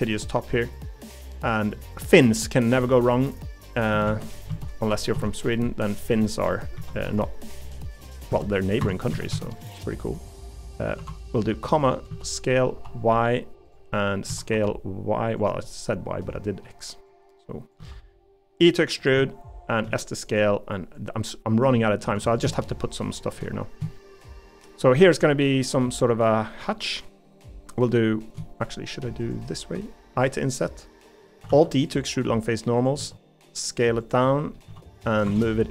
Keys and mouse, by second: 0.2 middle click, 0.7 middle click, 1.7 middle click, 2.8 middle click, 4.1 shift+d, 4.5 s, 6.2 middle click, 6.8 s, 8.3 x, 9.1 s, 11.0 ., 12.1 s, 13.9-15.4 middle drag, 14.3 s, 15.6-16.6 middle drag, 17.3 click, 17.8 e, 19.2 middle click, 19.8 s, 21.0 click, 21.8 middle click, 22.0 3, 25.0 middle click, 26.1 middle click, 30.1 i, 31.5 alt+e, 33.0 s, 34.3 middle click, 34.6 s, 35.2 Escape.